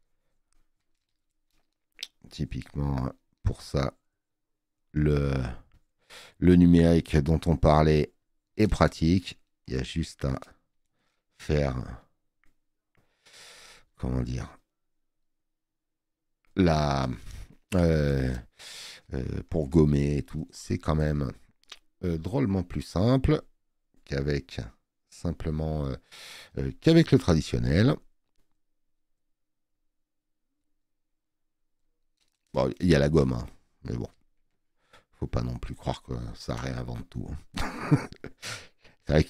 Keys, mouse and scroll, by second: 27.0 click.